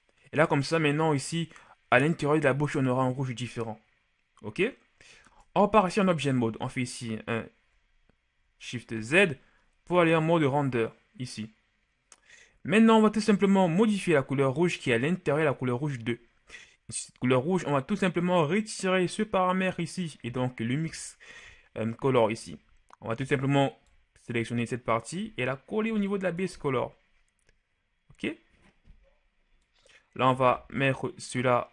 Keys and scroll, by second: 5.6 Tab, 9.2 shift+z.